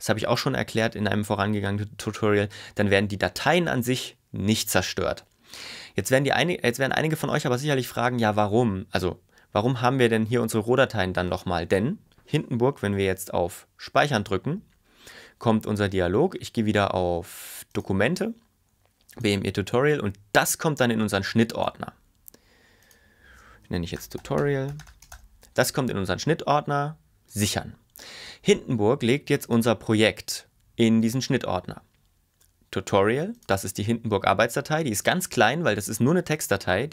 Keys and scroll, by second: 23.8-25.7 typing.